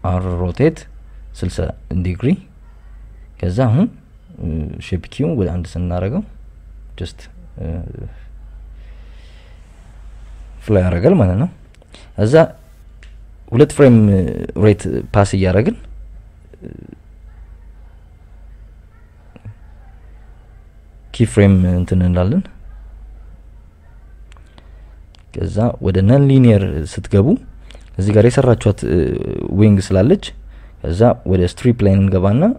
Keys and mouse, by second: 1.9 KP_Subtract, 2.0 KP_Subtract, 2.4 r, 3.7 KP_6, 3.9 KP_0, 4.2 KP_Enter, 5.1 a, 5.2 Tab, 6.2 KP_8, 6.5 KP_4, 7.7 click, 10.3 click, 11.9 click, 13.7 click, 14.9 Right, 15.4 Right, 16.3-17.2 drag, 17.5 click, 18.6 Right, 18.9 Right, 21.6 click, 22.9 click, 26.0-26.5 drag, 26.9-28.6 drag, 29.7 click, 30.5 click, 31.3 n, 32.2-32.5 drag.